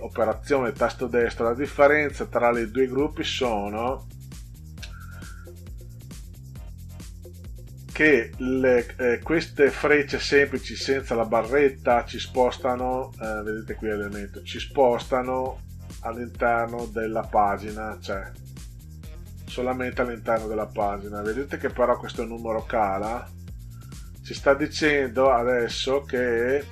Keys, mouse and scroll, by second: 3.8 click, 14.9 click, 15.5 click, 16.0 click, 16.5 click, 17.8 click, 18.3 click, 18.7 click, 19.2 click, 19.6 click, 20.0 click, 20.4 click, 20.7 click, 20.9 click, 22.7 click, 22.9 click, 23.2 click, 23.4 click, 23.6 click, 24.2 click, 24.4 click, 24.6 click, 25.3 click, 25.6 click, 25.8 click, 26.0 click, 26.3 click.